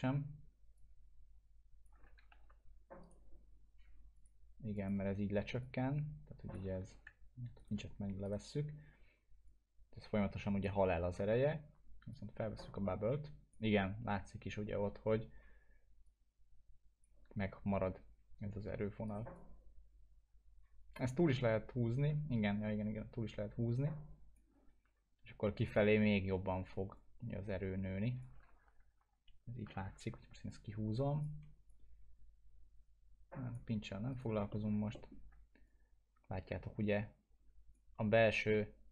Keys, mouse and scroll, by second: 2.3 ctrl+z, 3.0 right click, 4.1 click, 6.9 ctrl+z, 7.6 right click, 9.7-10.7 click, 11.0 ctrl+z, 12.4-13.7 drag, 19.1 right click, 19.3-24.6 drag, 27.2-28.5 drag, 28.4 ctrl+z, 30.8-31.4 click, 34.1 right click, 34.5 middle click, 34.7 scroll down 1, 34.9 alt+middle click, 35.6-37.8 drag.